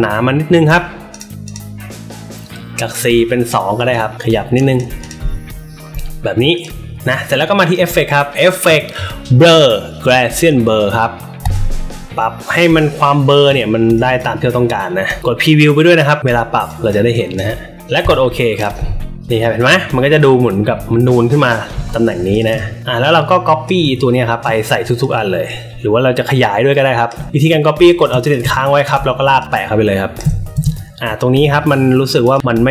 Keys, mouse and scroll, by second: 1.1 click, 1.4 click, 3.7 click, 4.1 click, 4.9 click, 5.2 alt+middle click, 6.5 click, 7.5 click, 11.3 click, 12.1 click, 12.7 click, 13.9 click, 14.4 click, 15.0 click, 16.6 click, 17.1 click, 18.0 click, 18.5 click, 19.0 alt+middle click, 19.2 click, 19.2 space, 20.7 alt+middle click, 21.9 alt+middle click, 22.3 drag, 22.4 space, 22.5 click, 23.6 alt+shift+click, 25.0-27.0 alt+drag, 27.2 alt+shift+click, 28.4 space, 28.5 click, 29.3-30.1 alt+shift+drag, 30.5 a, 32.2 click.